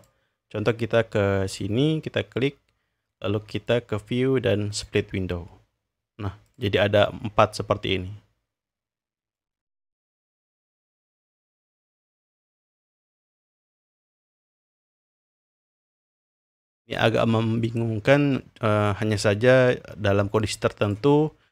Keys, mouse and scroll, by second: 0.0 click, 1.5 click, 3.5 click, 6.5 click, 7.6-9.4 drag, 9.9 drag, 10.6-11.3 scroll down 2, 11.3-11.8 scroll down 2, 12.2-12.8 scroll up 2, 12.8-13.8 scroll down 3, 13.8 scroll up 2, 13.9 scroll down 1, 14.0 scroll up 1, 14.2-16.1 scroll down 1, 16.1-16.9 scroll up 1, 16.9-19.1 scroll up 2, 20.4-21.0 drag.